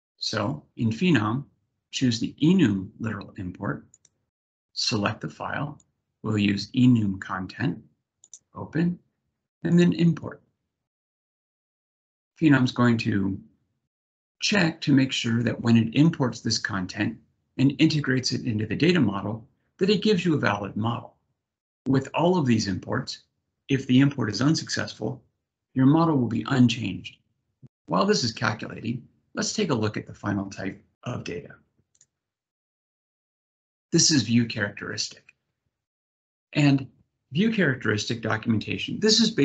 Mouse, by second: 3.6 click, 5.5 click, 8.0 click, 31.6 click, 33.1 click.